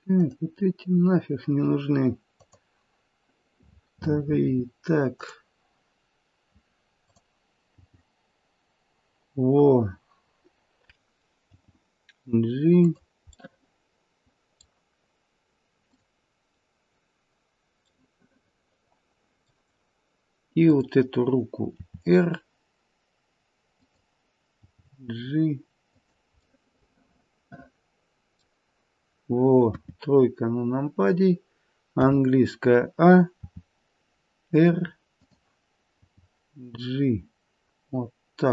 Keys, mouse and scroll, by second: 0.3 click, 2.4 click, 7.7 g, 10.9 middle click, 11.5 g, 13.3 middle click, 13.8 middle click, 15.8 click, 18.0 middle click, 20.6 click, 21.7 r, 24.6 g, 26.6 middle click, 27.5 middle click, 29.6 KP_3, 30.4-31.9 scroll down 3, 31.9-32.7 scroll down 3, 31.9 a, 33.3 r, 36.0 g.